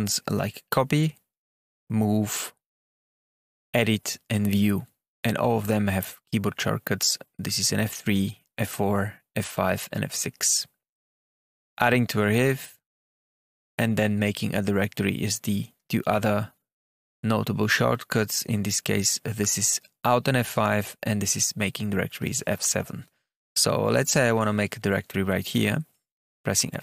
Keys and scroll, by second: 26.4 F7.